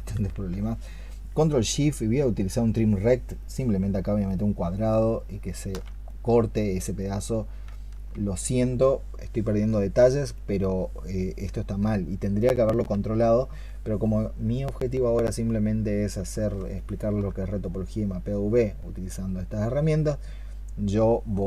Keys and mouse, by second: 2.5 ctrl+shift+click, 16.6 alt+click.